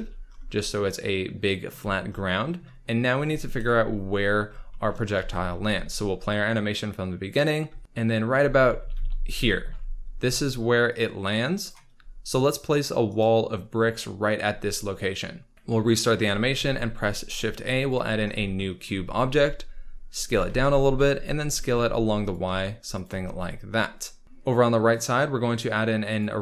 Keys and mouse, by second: 1.8 z, 3.5 KP_1, 5.2 ctrl+s, 5.5 space, 8.4 space, 8.7 space, 9.3 shift+space, 10.9 click, 12.3 shift+click, 13.0 shift+click, 16.5 shift+a, 19.1 s, 20.1 click, 20.3-22.5 typing, 22.9 click, 26.2-26.4 drag.